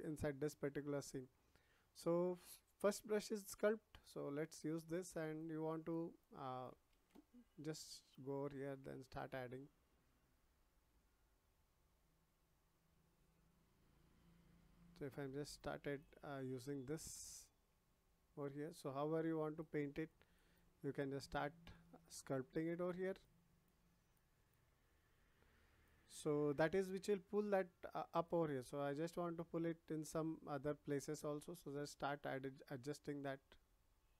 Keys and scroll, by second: 6.9 ctrl+z.